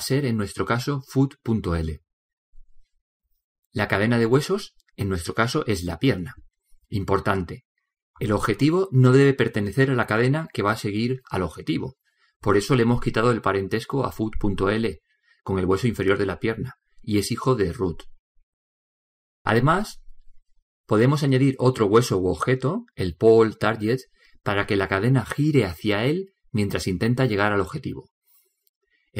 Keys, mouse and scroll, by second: 15.3-17.5 middle drag, 17.5 right click, 19.9-28.4 middle drag.